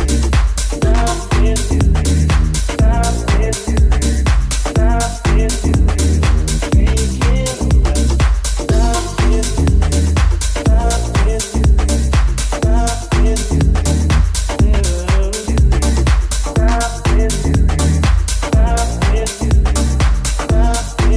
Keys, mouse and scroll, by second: 0.8 Tab, 1.4 shift+a, 2.8 s, 4.1 Tab, 7.5 alt+z, 8.1 click, 8.4-9.8 drag, 8.7 s, 9.8-11.7 middle drag, 9.8 g, 11.7-13.3 drag, 12.2 Tab, 12.7 g, 13.3 Tab, 13.3-15.7 middle drag, 14.9 i, 15.7 alt+right click, 15.8 alt+middle click, 16.1 right click, 16.2-21.1 middle drag, 17.0 ctrl+z, 17.5 click, 18.1 alt+z, 19.0 i.